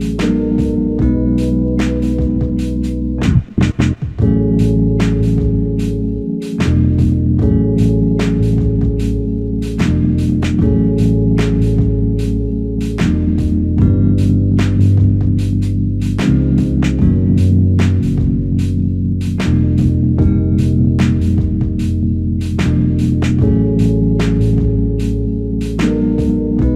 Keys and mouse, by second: 0.5 ctrl+click, 1.5 shift+click, 6.4 ctrl+z, 8.3 alt+click, 14.1 double click, 17.1 shift+click, 23.3 shift+click, 25.1 shift+click.